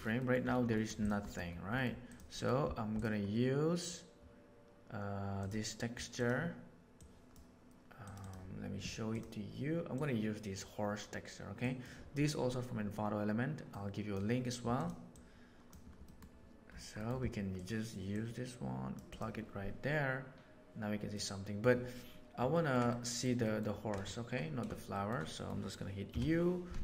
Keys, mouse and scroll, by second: 0.2 middle click, 2.0 click, 15.9 middle click, 18.0-18.9 drag, 21.0 middle click, 22.5 ctrl+middle click, 22.8 middle click, 23.4 ctrl+middle click, 24.8 shift+middle click, 25.2 middle click, 26.0 u.